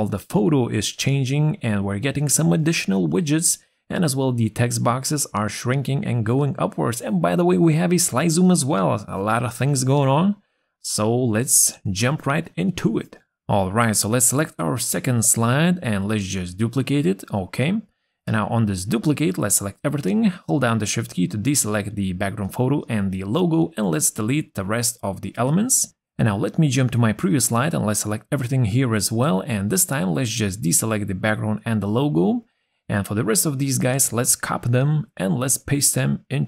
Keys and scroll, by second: 18.1 ctrl+d, 19.4 ctrl+a, 28.4 ctrl+a, 34.2 ctrl+c.